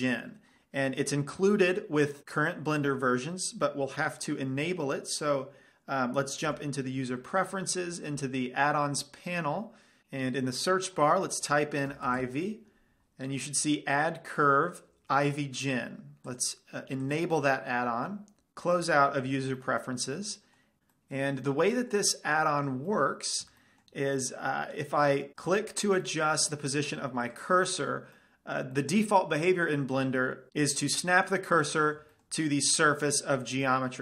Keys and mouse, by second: 0.0 click, 6.9 ,, 19.8 middle click, 21.1-25.3 middle drag, 25.6-29.3 right drag, 26.2-30.5 middle drag, 30.2 right click, 31.0-32.8 right drag, 31.4-34.0 middle drag.